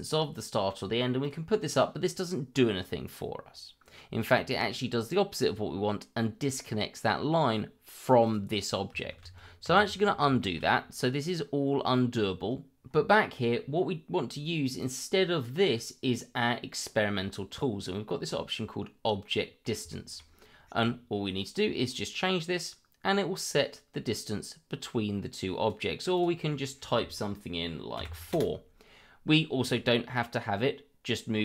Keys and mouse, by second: 1.2 click, 2.6-3.9 middle drag, 4.3 shift+middle drag, 8.2 click, 9.2 ctrl+z, 10.4 shift+middle drag, 10.8 middle drag, 19.2 middle click, 19.9 shift+middle drag, 21.9-25.7 drag, 26.1-28.3 drag.